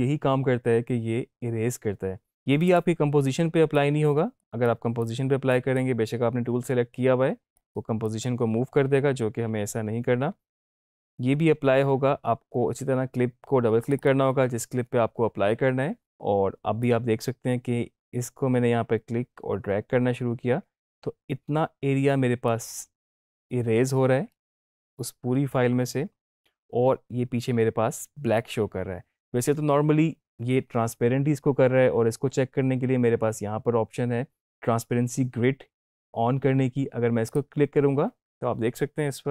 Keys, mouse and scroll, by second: 2.7-5.5 drag, 9.0 ctrl+z, 13.8 click, 16.8-28.4 drag, 37.3 click.